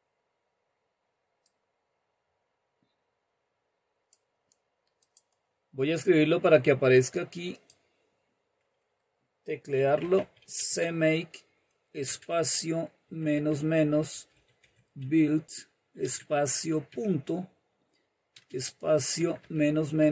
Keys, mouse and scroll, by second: 1.5-4.8 drag, 5.3 click, 7.5 click, 9.5-16.8 typing, 18.3 typing, 19.9-20.1 typing.